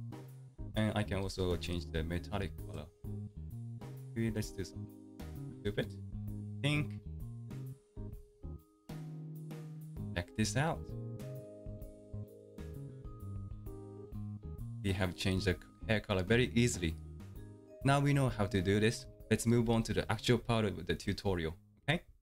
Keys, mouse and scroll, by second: 9.1-22.2 middle drag.